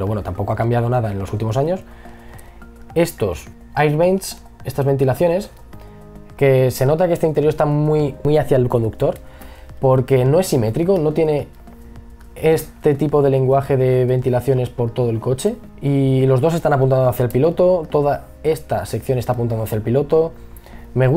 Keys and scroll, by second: 19.6 ctrl+z.